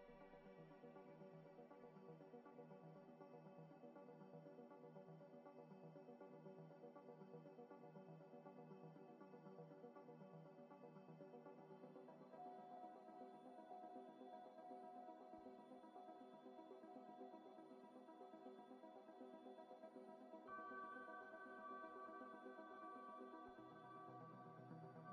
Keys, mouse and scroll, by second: 1.9 scroll up 1, 2.5 alt+Tab, 3.3 alt+Tab, 4.2 F3, 4.6-5.8 typing, 6.5 double click, 8.0 scroll up 1, 8.6 Tab, 9.0 Tab, 9.2 a, 9.9 double click, 10.3 Tab, 10.4-13.9 typing, 14.5 Tab, 14.7 scroll up 1, 14.8 middle click, 15.9 scroll up 1, 18.7 ctrl+right click, 19.7 Delete, 20.2 alt+Tab, 21.6 double click, 23.2 alt+Tab.